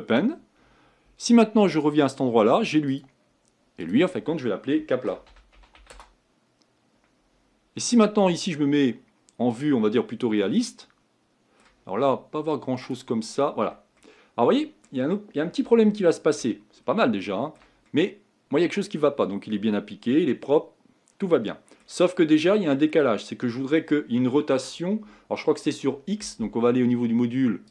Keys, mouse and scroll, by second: 3.0-8.3 drag, 9.6 click, 10.4-12.8 middle drag, 12.8 click, 13.4-14.0 scroll up 4, 14.0-16.6 middle drag, 16.6-17.2 scroll up 1, 17.2-20.9 shift+middle drag, 22.1-22.5 scroll down 2, 22.5-27.7 shift+middle drag.